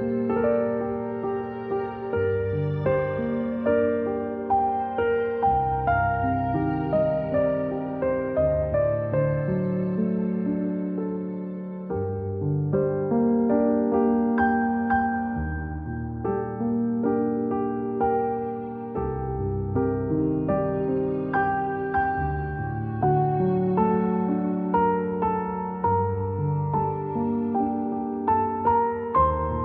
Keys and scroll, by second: 4.3-5.7 typing, 8.4 i, 10.6 v, 15.9-16.8 typing, 18.4 g, 28.1 v.